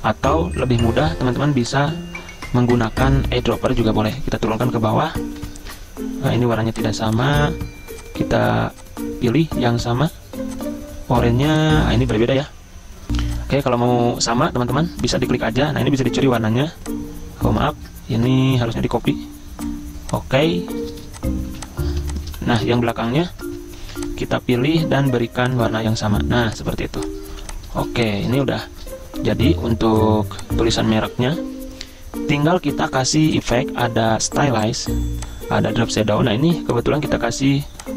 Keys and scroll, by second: 4.5 ctrl+shift+], 5.4 ctrl+shift+[, 11.4 z, 12.4 v, 18.3 ctrl+z, 21.5 ctrl+z, 22.3 v, 23.3 ctrl+z, 23.8 ctrl+2, 27.3 z, 28.4 v, 29.3 Escape.